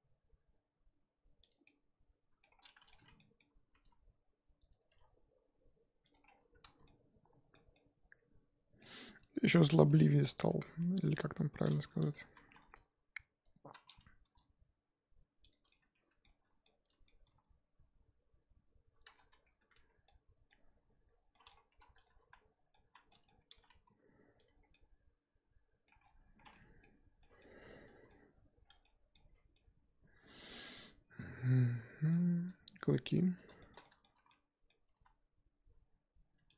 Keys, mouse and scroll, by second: 1.6 scroll down 1, 1.6 middle click, 2.6 scroll down 1, 2.6-3.7 middle drag, 3.7 g, 4.9 g, 6.2 scroll down 4, 6.4 Tab, 6.7 z, 6.8-9.4 middle drag, 9.4 scroll up 1, 9.7-10.6 middle drag, 10.6 KP_1, 11.1 click, 12.0 Tab, 12.3 z, 13.4 click, 13.7 z, 14.3 g, 15.7-17.3 middle drag, 17.3 g, 19.3 Tab, 19.6 Tab, 19.8 z, 20.0-20.6 middle drag, 20.6-21.3 scroll up 2, 21.3-21.7 middle drag, 21.7 3, 22.0 click, 22.2 z, 22.3-22.8 middle drag, 22.8 z, 23.1 middle click, 23.5 g, 24.5 scroll down 2, 24.7-26.0 middle drag, 26.0-26.5 scroll down 4, 26.5 middle click, 27.4-27.8 scroll up 1, 27.8 middle click, 28.2-28.6 scroll up 2, 28.6 scroll down 2, 28.8-32.1 middle drag, 32.1 scroll up 2, 32.3 Tab, 32.8 click, 32.9 middle click, 33.2-33.6 scroll up 1, 33.6 shift+middle click, 34.0 scroll up 2, 34.3 middle click, 34.8 g.